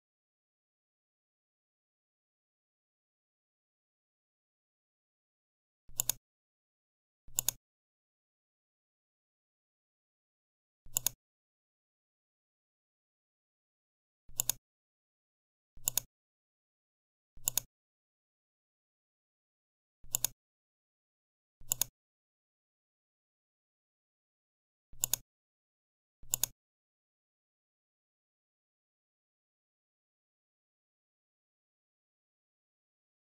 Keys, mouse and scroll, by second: 0.5-1.5 Right, 2.4 Left, 3.2 Left, 3.3 Left, 3.5 Left, 5.8 click, 7.2 click, 10.8 click, 14.2 click, 15.8 click, 17.3 click, 20.0 click, 21.6 click, 24.0 ctrl+z, 24.9 click, 26.2 click.